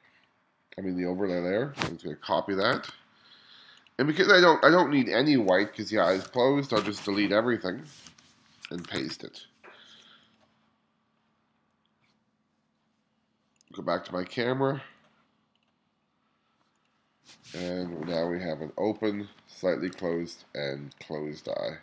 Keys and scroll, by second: 2.8 super+c, 6.3 BackSpace, 8.1 BackSpace, 9.1 super+v, 18.0 [, 19.2 [, 19.2 ], 19.9 ], 21.5 [.